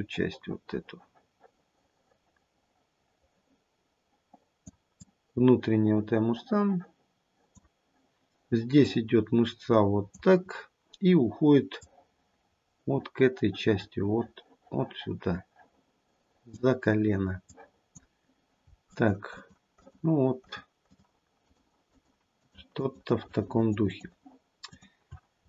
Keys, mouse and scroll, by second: 0.2 click, 5.0 click, 8.8 click, 11.7 click, 17.7 click, 18.8 shift+click, 19.2 shift+click, 19.7 shift+click, 20.3 shift+click, 20.8 shift+click, 21.4 shift+click, 21.9 shift+click, 22.3 shift+click, 22.7 shift+click, 23.1 shift+click, 23.5 shift+click, 23.8 shift+click, 24.6 shift+click, 25.3-25.4 scroll down 1.